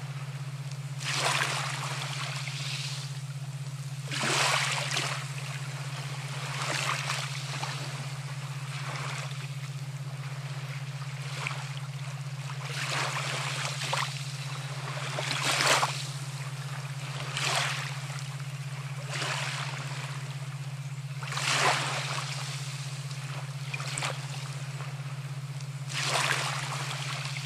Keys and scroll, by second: 5.8 ], 10.2 ctrl+z, 17.9 [, 19.1 ctrl+z.